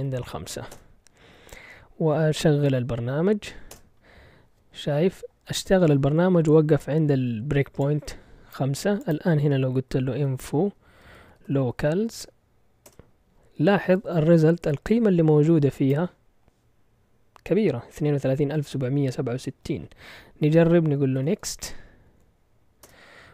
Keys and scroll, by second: 0.0-0.7 typing, 2.0-3.7 typing, 9.7-12.8 typing, 20.9-22.8 typing.